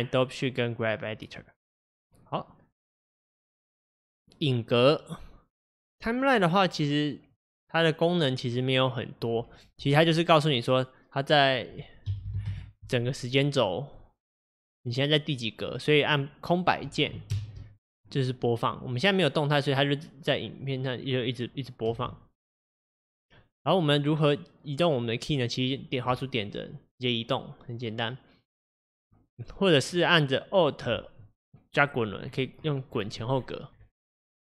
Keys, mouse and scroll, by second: 14.0-17.3 drag, 17.3 space, 20.7-22.0 middle drag, 22.0 space, 22.6-29.2 drag, 31.6-32.2 alt+scroll up 7, 32.2 alt+scroll down 7, 32.4 alt+scroll up 1, 32.6-33.4 alt+scroll down 18, 33.4-34.3 alt+scroll up 17, 34.3 alt+scroll down 1, 34.4 alt+scroll up 5.